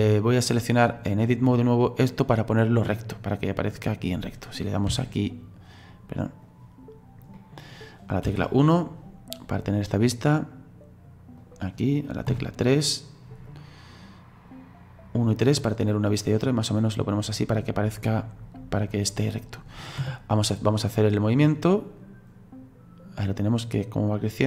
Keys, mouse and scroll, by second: 0.3-2.0 drag, 2.0 right click, 2.8 right click, 7.3 middle click, 8.2 KP_1, 9.4-12.3 right drag, 12.3 KP_3, 13.5 right click, 16.1 right click, 18.1-18.4 scroll down 2, 18.4-18.9 scroll up 4, 18.9-20.8 middle drag, 20.8-24.4 drag.